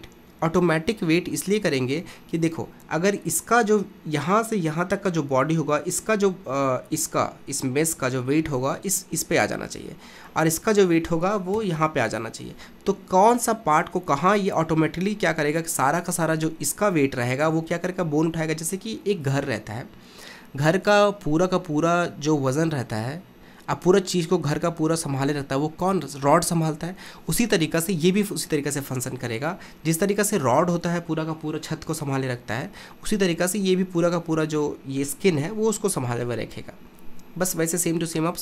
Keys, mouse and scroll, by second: 11.6 KP_1.